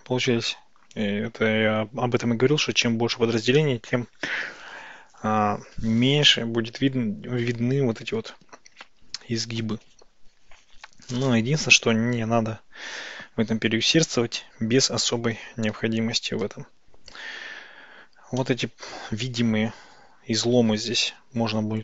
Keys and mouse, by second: 3.6-5.7 middle drag, 18.5 middle click.